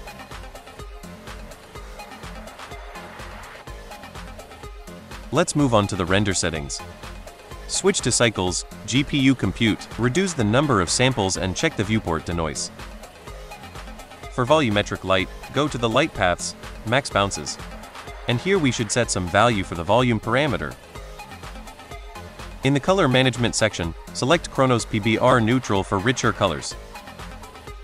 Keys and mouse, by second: 1.0 click, 2.3 click, 3.4 click, 6.5 click, 7.2-7.9 drag, 8.4-9.0 drag, 9.7 click, 11.6 click, 12.1 click, 14.6 click, 17.5-19.8 drag, 21.2 click, 22.3 click, 24.6 click.